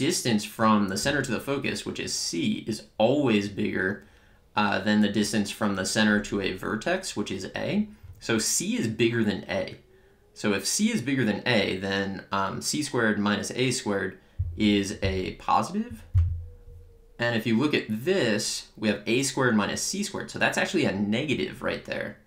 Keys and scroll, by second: 16.1 Return.